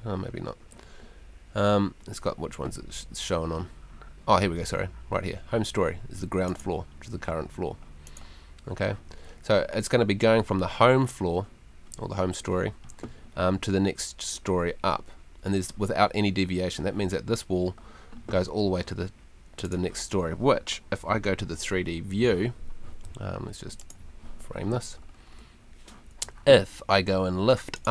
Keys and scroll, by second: 21.4 F3.